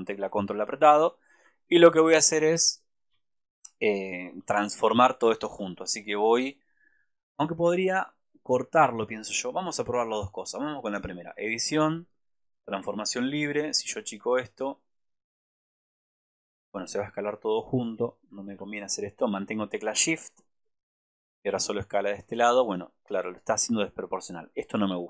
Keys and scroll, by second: 18.6 ctrl+z.